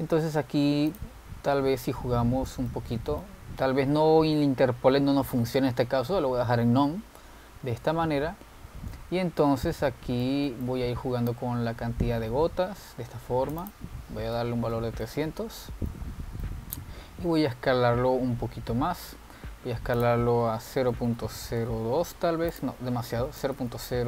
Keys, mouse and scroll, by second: 0.1 scroll down 5, 1.1 click, 2.0 click, 3.1-3.8 scroll down 2, 3.8-6.8 middle drag, 8.8 scroll up 3, 9.2-10.5 scroll down 3, 10.8-12.5 middle drag, 12.5-16.0 drag, 16.0 0, 17.0-19.2 middle drag, 19.2-19.9 scroll down 4, 19.9-20.6 scroll down 3, 20.6-21.1 scroll down 1, 21.1-24.0 drag.